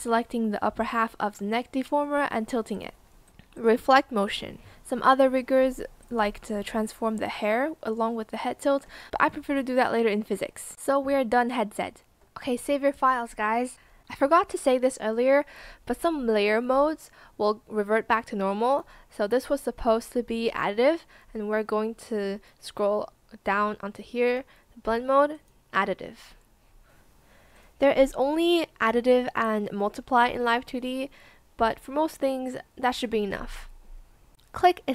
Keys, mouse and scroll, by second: 0.0 shift+click, 1.3 shift+click, 10.4 ctrl+s.